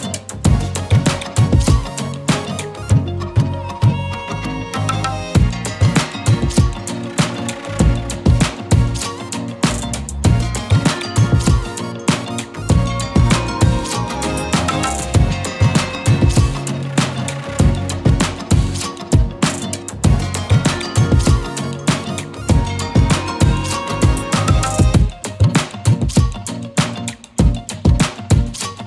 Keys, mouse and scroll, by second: 0.2 click, 4.6-6.5 alt+shift+click, 8.0 z, 8.3 click, 8.5 space, 8.6 click, 8.8 z, 10.1 Down, 11.5 z, 11.9 click, 12.1 z, 12.3 click, 21.1 right click, 21.5 click, 27.2 right click, 28.7 click.